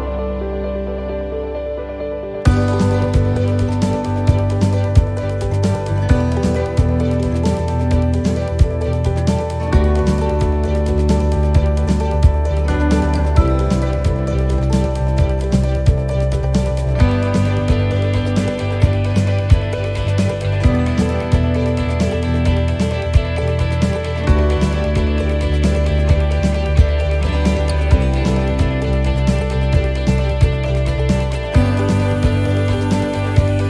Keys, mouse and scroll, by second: 3.8 ctrl+r, 3.8 middle click, 5.1 s, 8.0 ctrl+r, 8.0 s, 9.5 ctrl+r, 10.5 s, 11.7 shift+middle click, 12.6 ctrl+r, 13.6 s, 14.6 middle click, 15.1 shift+middle click, 15.6 scroll down 3, 16.0 shift+middle click, 16.4-16.8 scroll up 8, 18.2-18.6 scroll down 3, 18.7 middle click, 19.2 shift+middle click, 19.8-20.2 scroll down 1, 20.2 shift+middle click, 21.5 shift+middle click, 21.5-22.3 shift+scroll up 2, 23.7 alt+shift+click, 25.4 ctrl+r.